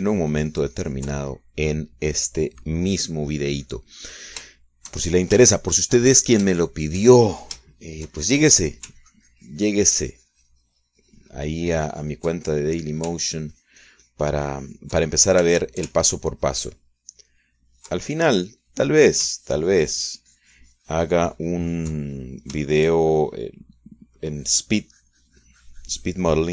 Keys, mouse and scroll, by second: 1.2-2.4 ctrl+drag, 4.2 middle click, 5.7-8.1 shift+drag, 8.1-10.1 shift+middle drag, 10.3-14.4 ctrl+drag, 14.2 ctrl+right click, 14.5-16.7 ctrl+drag, 16.7-18.0 ctrl+shift+middle drag, 18.0-19.2 ctrl+shift+drag, 19.3 ctrl+middle click, 20.1 middle click, 20.7-23.8 ctrl+drag, 23.8-25.6 ctrl+shift+middle drag, 25.6-26.5 drag.